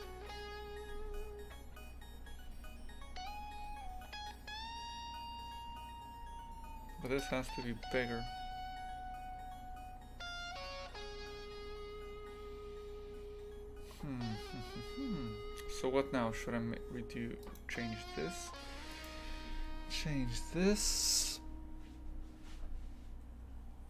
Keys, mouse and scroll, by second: 7.0-23.8 right drag.